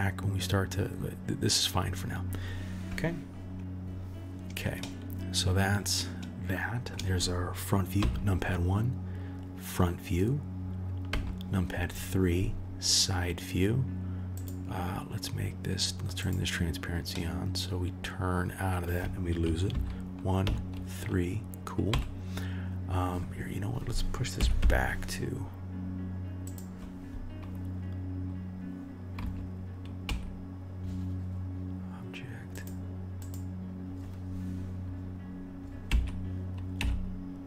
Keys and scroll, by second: 8.0 KP_1, 11.1 KP_3, 19.7 KP_1, 20.4 KP_3, 21.9 KP_1, 24.4 g, 29.2 KP_3, 30.0 KP_1, 35.9 g.